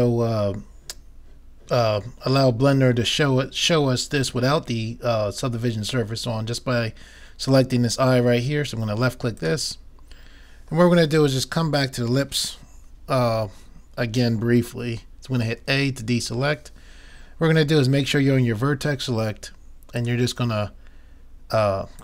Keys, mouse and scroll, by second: 9.4-11.0 drag, 11.0-12.6 middle drag, 15.6 a, 19.5 middle click, 20.0 middle click, 20.1-22.0 drag, 21.9 middle click.